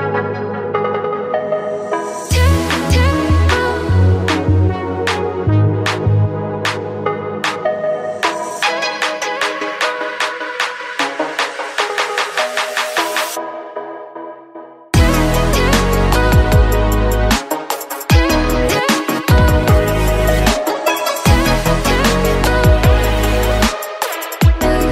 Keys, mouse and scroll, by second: 1.0 ctrl+z, 1.8 click, 3.2 middle click, 4.0 click, 4.7 middle click, 5.3 click, 7.6-9.9 middle drag, 9.9 ctrl+r, 13.5-15.6 middle drag, 15.6 ctrl+r, 17.0 ctrl+r, 18.4 scroll down 2, 18.7-22.4 middle drag, 22.4 ctrl+r, 24.0-24.7 scroll down 3, 24.7-24.9 middle drag.